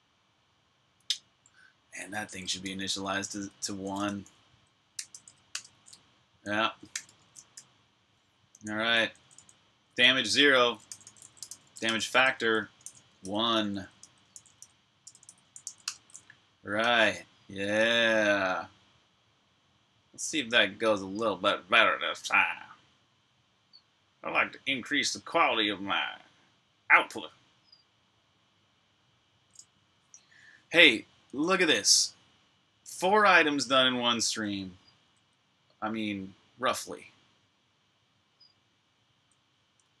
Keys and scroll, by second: 2.2-3.7 typing, 4.8-5.3 typing, 6.7-7.8 typing, 8.9-15.2 typing, 16.6 super+r, 16.8-18.2 typing, 34.3-40.0 typing.